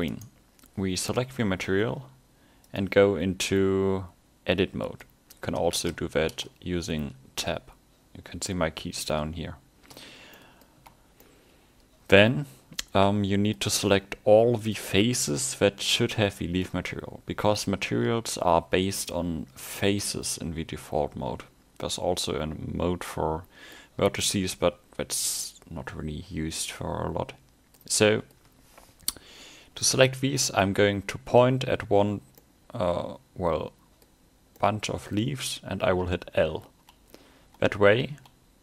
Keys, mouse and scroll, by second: 0.1 right click, 5.1 click, 5.8 Tab, 10.4 middle click, 10.8 a, 11.2 scroll up 1, 11.3 middle click, 14.6 click, 16.7 middle click, 19.2 shift+scroll up 4, 19.8 middle click, 24.1 scroll up 1, 24.6 middle click, 28.0 middle click, 32.4 middle click, 34.6 middle click, 36.1-38.6 l.